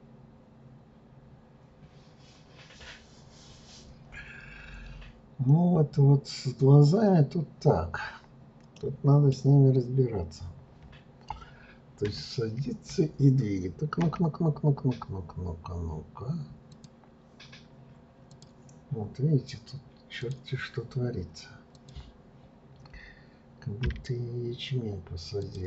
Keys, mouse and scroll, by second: 5.0-5.6 scroll up 2, 8.7-11.8 middle drag, 12.0 KP_3, 12.6 KP_1, 16.7 click, 18.3 click, 20.2 click, 21.7 click, 23.8 g.